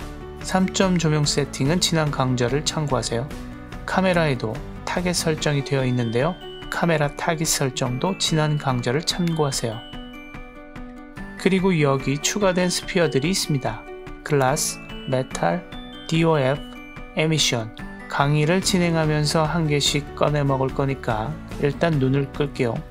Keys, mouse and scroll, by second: 1.4 right click, 3.3 click, 4.1 click, 4.3 click, 5.9-7.3 right drag, 7.3 click, 7.6-8.1 scroll up 1, 8.1 g, 9.3-9.7 right drag, 9.7 scroll down 1, 10.6 click, 11.6-12.6 drag, 14.5 click, 15.0 click, 15.3 click, 16.1 click, 16.9 click, 19.7 click, 20.1 click, 20.9 click, 21.4 click, 21.8 click, 22.8 click.